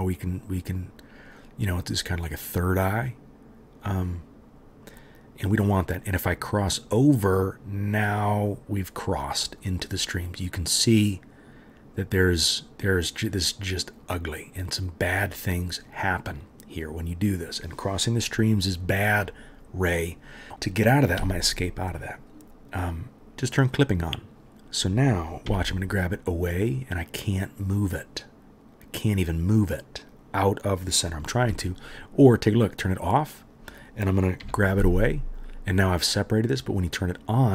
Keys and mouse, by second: 25.4 g, 33.0-37.5 right drag, 34.4 g.